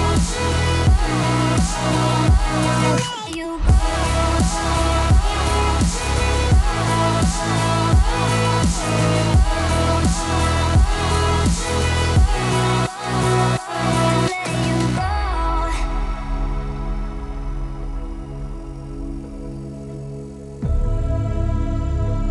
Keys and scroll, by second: 2.9 Delete, 17.5 t, 19.7 t.